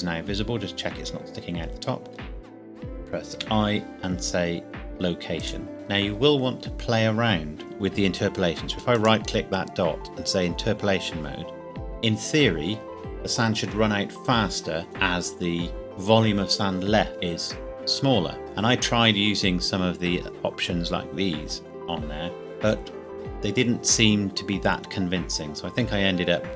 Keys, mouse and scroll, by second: 0.3 middle click, 3.3 i, 5.4 click, 7.6 KP_1, 9.0 right click.